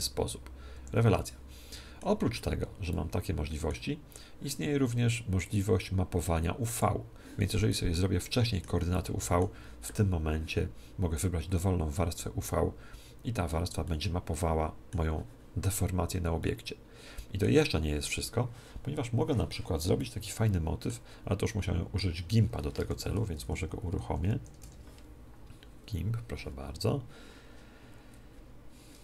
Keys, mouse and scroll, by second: 1.1-4.8 middle drag, 2.1 z, 5.4-7.3 drag, 7.6-10.7 middle drag, 13.8-15.6 middle drag, 16.3-18.1 middle drag, 19.9-23.2 middle drag.